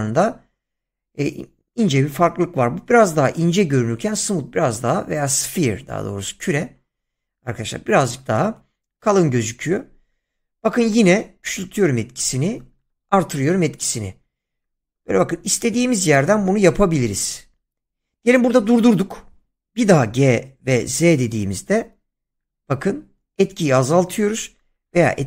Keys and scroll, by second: 19.8 g, 20.8 z.